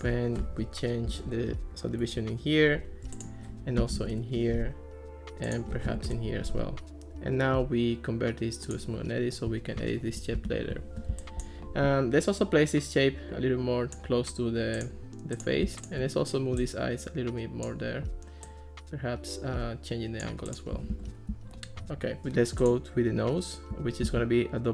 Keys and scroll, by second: 1.1 8, 2.0 Return, 3.6-4.5 typing, 5.9 3, 6.1 Return, 10.4 Escape, 20.9 alt+r, 24.1 super+d.